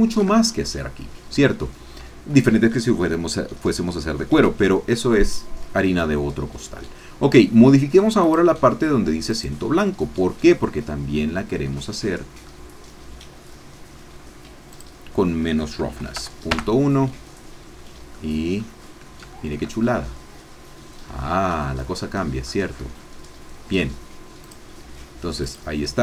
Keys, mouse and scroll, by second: 0.4-3.5 shift+scroll up 2, 8.2 click, 9.3 click, 11.7 middle click, 14.7-15.9 drag, 15.9 KP_Decimal, 16.1 KP_1, 16.5 KP_Enter, 17.7-18.1 scroll down 2, 18.1 click, 18.7-19.3 scroll down 3, 19.3-21.8 shift+drag, 22.0-22.7 scroll up 4, 22.7 middle click, 22.9-23.2 scroll down 2, 23.2 middle click, 24.4 click, 25.6 click.